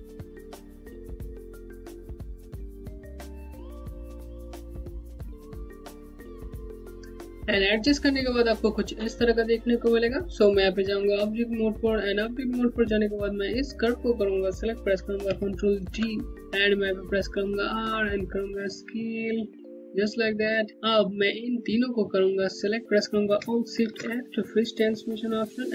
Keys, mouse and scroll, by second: 4.2 scroll down 1, 4.3 alt+click, 4.4 Home, 4.5 scroll up 1, 4.7 click, 4.9 Home, 5.4 scroll down 1, 5.5 Home, 5.7 scroll up 1, 5.7 alt+click, 5.8 Home, 6.0 click, 6.6 right click, 10.1 right click, 10.4 Home, 12.8 click, 15.4 ctrl+d, 16.3 z, 16.8 click, 17.5 middle click, 21.2 middle click, 21.4 click, 23.5 alt+shift+f.